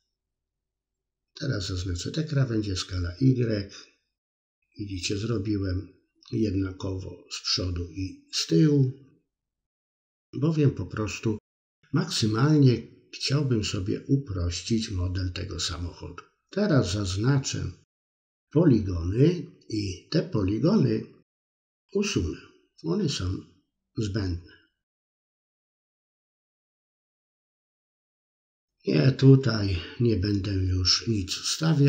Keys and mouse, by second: 0.2 middle click, 0.9 shift+click, 1.6 s, 2.3 middle click, 2.9 middle click, 3.3 middle click, 4.7 shift+click, 5.1 middle click, 5.9 shift+click, 6.5 i, 7.0-8.8 drag, 8.2 BackSpace, 9.0 middle click, 9.5 middle click, 9.7 middle click, 10.0-11.5 middle drag, 11.7 KP_1, 12.4 middle click, 14.3-15.9 shift+drag, 16.0 middle click, 16.6 shift+click, 17.2 middle click, 17.7-19.0 shift+drag, 19.1 middle click, 19.5 x, 21.0 middle click, 21.7 KP_3, 22.0 middle click, 22.5 middle click, 23.6-25.2 shift+drag, 25.2-26.3 middle drag, 27.8-28.9 drag, 29.6 ctrl+z, 30.5 ctrl+r, 31.3 middle drag, 31.6 drag, 31.7-31.8 middle drag.